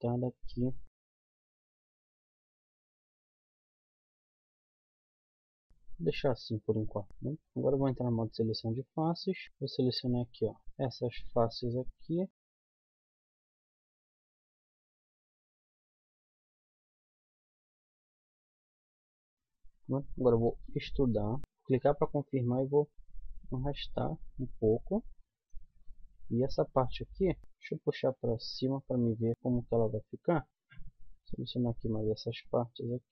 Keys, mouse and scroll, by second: 0.0 click, 1.0-5.1 typing, 2.0 click, 2.5 click, 3.6 click, 7.0 g, 7.1 z, 9.4 right click, 13.5 z, 14.4 middle click, 14.8 KP_1, 15.0 z, 16.1 z, 16.4 z, 16.8 z, 17.3 middle click, 18.6 KP_1, 18.7 z, 19.0 z, 20.7 e, 22.6 click, 26.1 KP_1, 26.9 z, 27.4 click, 29.3 z, 29.7 middle click, 30.5 ctrl+z, 32.1 middle click.